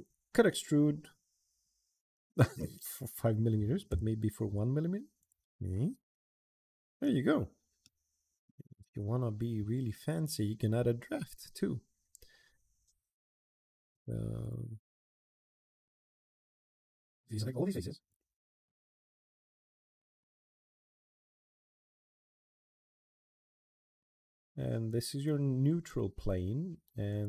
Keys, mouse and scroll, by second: 5.0 click, 5.4 middle click, 5.8 scroll up 1, 5.8 middle click, 6.3 middle click, 7.1-7.6 middle drag, 8.0-9.4 middle drag, 10.9 click, 13.7 click, 14.2 click, 15.6 click, 15.8 middle click, 16.3 click, 17.3 click, 17.8 click, 18.1 drag, 18.6 middle click, 18.8 click, 18.9 click, 19.0 click, 19.1 click, 19.2 click, 19.4 click, 19.6 click, 19.7 middle drag, 20.2 click, 20.5 click, 20.7 middle click, 21.1 click, 21.2 click, 21.3 middle click, 21.9 middle click, 22.3 click, 22.4 click, 22.5 click, 22.8 right click, 23.0 click, 23.1 middle click, 23.4 click, 23.5 middle click, 24.2 click, 24.6 click, 26.8 click.